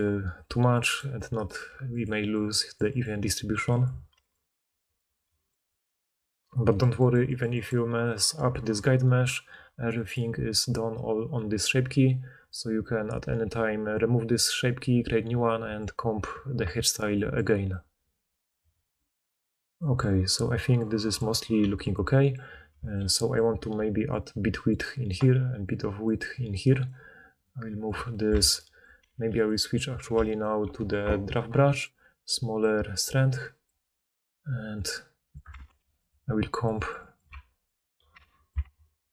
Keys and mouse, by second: 1.6 f, 2.0 click, 6.7-10.1 middle drag, 12.4-21.7 middle drag, 21.5 f, 21.7 click, 23.7-26.9 typing, 24.0-28.1 drag, 28.4 ctrl+z, 29.0 f, 29.5 click, 30.4-32.6 shift+middle drag, 32.6-36.0 drag, 35.6 ctrl+z, 35.7 f, 36.0 middle click, 36.1-37.9 drag, 38.6 ctrl+z.